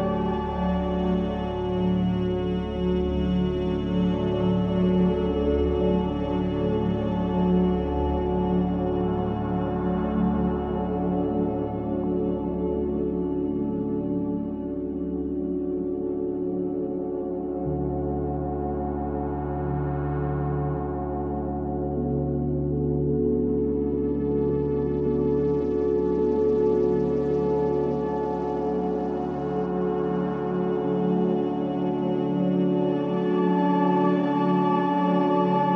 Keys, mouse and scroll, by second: 0.4 s, 5.1-15.6 drag, 15.6-21.6 right drag, 21.6-26.8 drag, 26.8 shift+a, 30.8-35.7 drag.